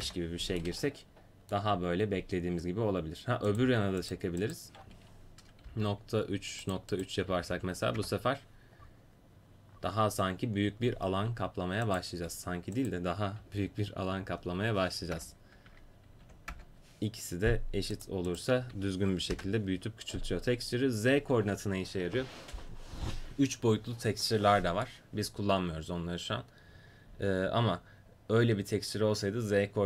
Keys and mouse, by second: 0.8 click, 1.1 middle click, 1.4-4.4 middle drag, 4.4-6.8 drag, 6.9-8.1 drag, 15.7 Tab, 16.2 4, 16.5 Return.